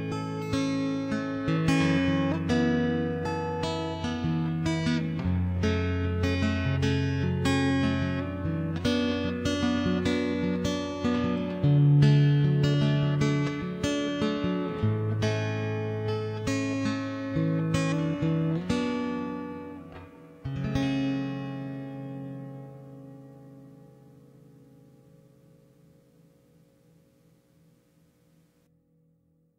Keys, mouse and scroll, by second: 0.6 0, 1.7 Tab, 2.0 Tab, 2.3 right click, 2.5 1, 2.8 right click, 3.0 shift+space, 3.2 shift+space, 3.4 alt+c, 3.8 shift+space, 5.9 click, 7.4 KP_0, 7.9 shift+space, 9.9 KP_0, 10.9 click, 12.4 middle click, 12.9 shift+space, 13.5 middle click, 13.7 alt+h, 14.1 right click, 14.2 shift+space, 14.5 click, 15.0 click, 15.4 right click, 15.8 ctrl+j, 15.9 shift+space, 16.1 z, 16.5 middle click, 17.1 middle click, 17.7 middle click, 17.9 middle click, 19.1-20.1 middle drag, 20.2 middle click, 21.0 middle click, 21.4 right click, 22.0 middle click, 22.4 right click, 23.1 middle click, 23.6 g, 23.9 right click, 25.0 ctrl+j, 25.1 middle click, 25.3 right click, 25.9 alt+c, 26.7 click, 27.0 right click, 27.6 ctrl+j, 27.7 middle click, 28.9 middle click.